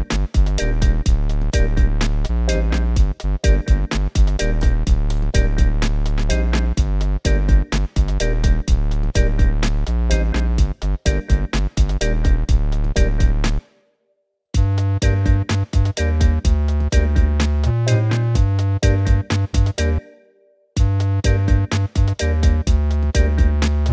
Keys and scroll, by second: 3.2 5, 4.7 Return, 13.6 space, 20.0 space.